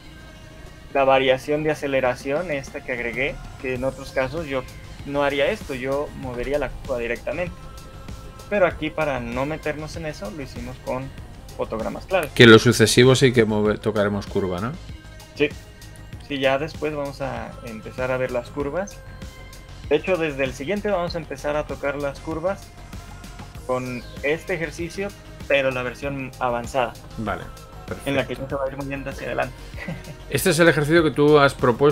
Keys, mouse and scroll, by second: 16.6 shift+middle click, 16.6 click, 16.6 scroll down 5, 17.6 shift+middle click, 18.0-18.4 scroll up 3, 18.4 shift+middle click, 18.6 scroll up 1, 19.0 shift+middle click, 20.8 click, 22.0 shift+middle click, 25.1-30.3 scroll down 1.